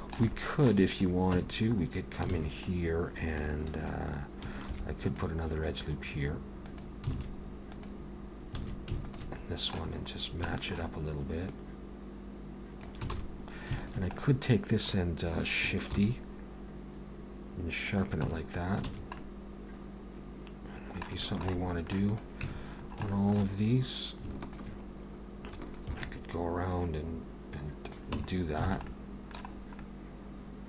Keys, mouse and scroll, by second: 0.3 middle click, 0.9 click, 1.4 Tab, 1.7-2.2 scroll up 3, 2.3 alt+a, 2.7 scroll up 1, 4.7 ctrl+r, 7.2 alt+a, 8.4 click, 8.6 alt+a, 9.0 alt+shift+click, 9.4 middle click, 10.2 scroll down 2, 10.5 shift+middle click, 11.5 click, 13.1 alt+a, 13.8 alt+shift+click, 14.2 middle click, 15.9 shift+e, 18.3 Tab, 18.4-18.8 scroll down 2, 18.9 alt+a, 19.2 middle click, 21.2 shift+middle click, 21.5 middle click, 22.0 click, 22.5 Tab, 22.8 scroll up 2, 23.1 shift+middle click, 24.4 alt+shift+click, 25.9 shift+e, 28.2 Tab, 28.3-28.7 scroll down 3, 28.7 alt+a, 28.9 middle click, 29.6-30.6 scroll up 2, 29.8 middle click.